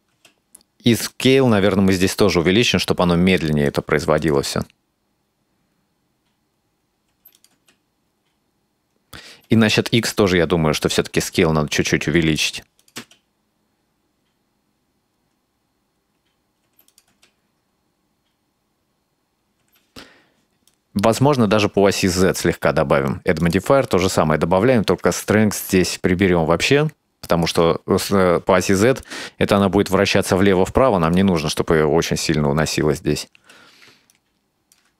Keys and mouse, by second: 0.2 space, 1.1-3.8 drag, 4.2 click, 4.4 space, 7.1 space, 7.4 click, 7.6 space, 9.3 space, 10.0 click, 11.2-12.5 drag, 12.8 click, 13.0 space, 16.7 space, 16.9 click, 17.1 space, 19.6 space, 20.7-21.5 drag, 21.9 click, 23.5 click, 25.2-27.6 shift+drag, 29.1-29.7 middle drag, 31.1 click, 31.3 space, 33.4 space, 34.1 click.